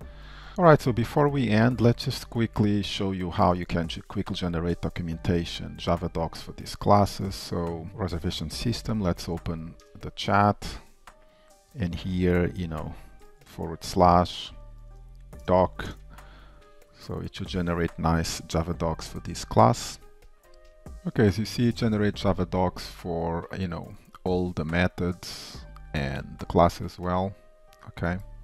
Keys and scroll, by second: 8.9 shift+super+a.